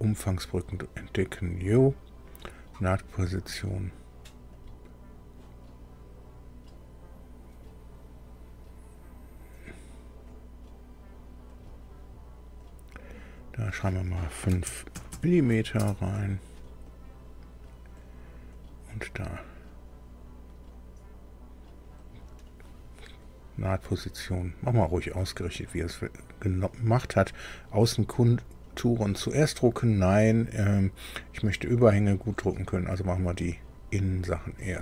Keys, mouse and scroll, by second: 4.5 click, 11.5 click, 12.6 click, 13.4 click, 14.5 space, 14.9 m, 15.1 m, 15.8 Return, 16.8 click, 18.0 click, 18.5 click, 22.0 click, 23.8 click, 24.8 click.